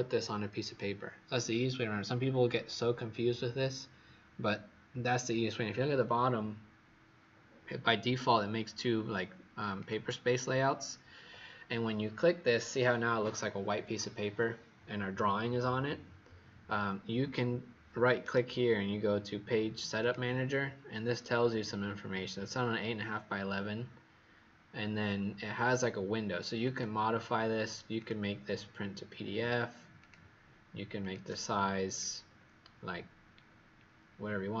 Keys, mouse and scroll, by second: 9.8 click, 18.1 right click, 19.9 click, 32.2-32.9 scroll up 2, 33.4-34.6 scroll down 2.